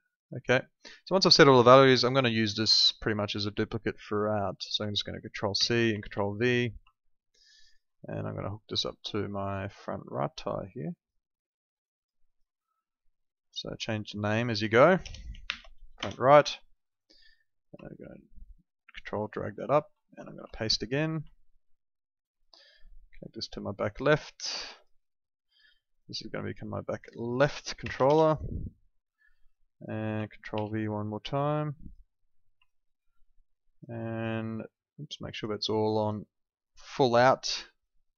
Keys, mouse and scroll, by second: 5.5 ctrl+c, 6.0 ctrl+v, 6.8 ctrl+click, 11.8 click, 15.0 BackSpace, 15.4 shift+r, 15.9 Return, 15.9 KP_Enter, 17.3 click, 17.8 ctrl+click, 19.3 click, 20.3 ctrl+v, 21.2 ctrl+click, 27.8 shift+b, 28.0 Return, 29.5 click, 30.5 ctrl+v, 31.3 click, 32.6 ctrl+click.